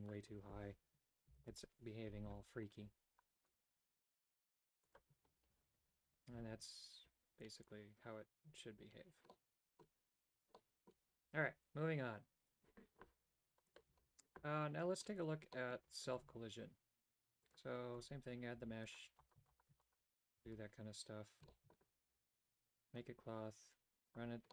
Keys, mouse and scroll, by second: 0.1-2.3 drag, 3.5 right click, 5.0 click, 9.5 middle click, 10.7 middle click, 15.5 middle click, 16.1 shift+a, 18.0 Tab, 18.6-20.4 typing, 21.5 shift+middle click, 24.1 click.